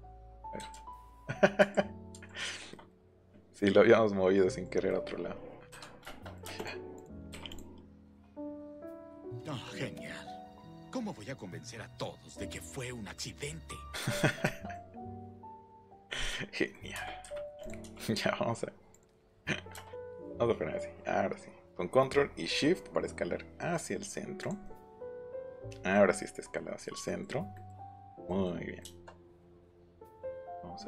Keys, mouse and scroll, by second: 0.1 middle click, 0.7 ctrl+z, 1.0 ctrl+z, 1.6 ctrl+z, 6.6 click, 7.0 click, 7.3 p, 7.5 click, 8.0 click, 10.2-10.5 scroll down 1, 11.0 ctrl+h, 12.6 click, 13.9 click, 15.2 click, 16.0 click, 17.6 click, 17.8 s, 18.9 click, 24.4 click, 24.6 middle click, 27.4 middle click, 28.0 middle click.